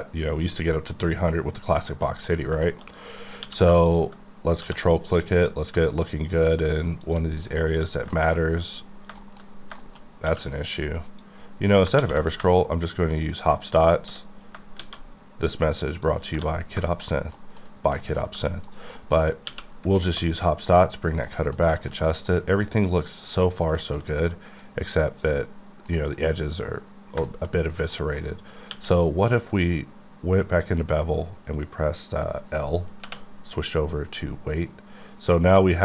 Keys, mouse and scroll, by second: 0.0-0.8 scroll up 4, 0.8 middle click, 1.0-1.3 scroll down 2, 1.3 middle click, 1.6 scroll up 2, 1.9 shift+middle click, 2.3-3.3 scroll up 6, 2.7 shift+middle click, 3.4 q, 3.9 ctrl+click, 4.6 1, 7.1 click, 7.3 scroll down 5, 7.6 middle click, 7.8-8.9 scroll up 5, 8.2 shift+middle click, 8.9 scroll down 4, 9.2 shift+middle click, 9.8 shift+middle click, 10.0 shift+scroll up 2, 10.3 q, 10.8 click, 12.0 alt+w, 13.4 ctrl+click, 14.0 s, 14.8 shift+z, 16.0 click, 16.3-17.4 scroll down 3, 16.9 shift+middle click, 17.4 middle click, 18.0 middle click, 18.7 click, 19.0 middle click, 19.2 scroll up 1, 20.1 alt+click, 20.7 middle click, 20.8-21.3 scroll down 2, 20.9 q, 21.3 middle click, 22.9-23.4 scroll down 2, 23.4 middle click, 23.7 shift+middle click, 24.1 middle click, 26.0 middle click, 27.2 shift+middle click, 27.5 middle click, 28.3-28.7 scroll up 1, 28.7 q, 29.6 click, 33.1 l.